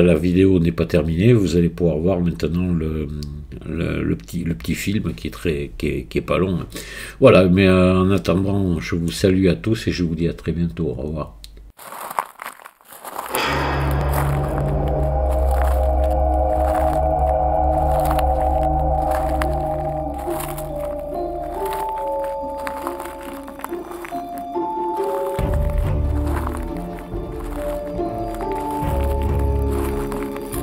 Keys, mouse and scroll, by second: 8.2-9.1 middle drag.